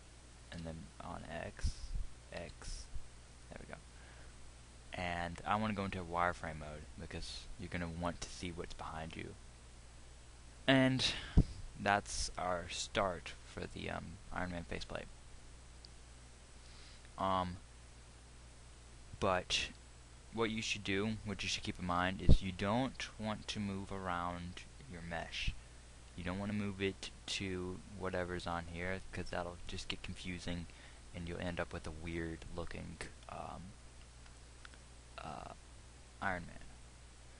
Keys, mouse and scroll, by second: 11.9 middle click, 12.7-22.5 middle drag.